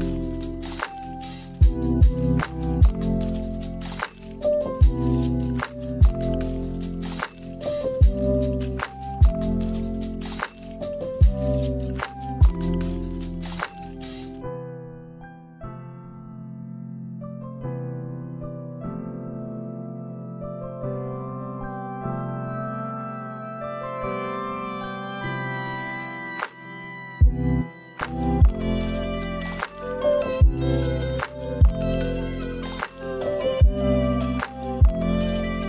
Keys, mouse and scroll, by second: 1.1 click, 3.5 click, 5.8 middle click, 7.2-8.4 scroll down 2, 7.6 middle click, 8.4-8.7 scroll up 2, 8.7 middle click, 9.9 space, 10.5 scroll down 1, 10.8 middle click, 12.8 middle click, 15.4 click, 15.9 click, 16.7 middle click, 17.6 scroll down 1, 18.1 space, 18.4 middle click, 18.5 shift+middle click, 18.8 middle click, 19.0 scroll up 2, 19.1 middle click, 19.2-20.1 scroll down 8, 19.3 space, 20.1 middle click, 20.5 space, 20.6 middle click, 20.9 shift+middle click, 21.0-21.4 scroll up 2, 21.1 middle click, 21.6 click, 22.1 click, 22.5 KP_0, 22.8 middle click, 23.0 space, 24.1-24.9 scroll down 2, 24.9 space, 25.5 middle click, 25.5 click, 25.8 KP_0, 26.7 click, 27.5 click, 28.0 middle click, 28.2 middle click, 28.5 scroll up 2, 28.6 middle click, 29.2 middle click, 29.2 scroll up 2, 29.4 click, 30.6 click, 31.7 middle click, 32.7 click, 32.9 middle click, 33.4 middle click, 33.7 scroll up 2, 33.8 middle click, 35.1 scroll down 3, 35.2 middle click.